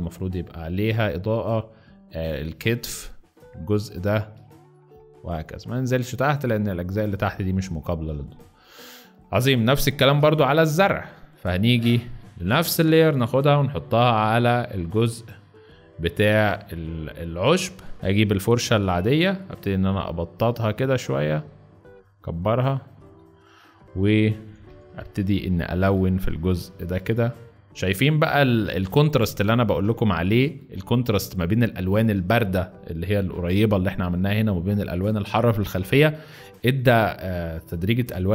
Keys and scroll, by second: 5.8 z, 8.1 space, 8.8 z, 9.9 ctrl+d, 17.9 ctrl+d, 23.8 ], 24.6 ], 24.8 ], 24.9 ], 27.7-30.6 typing.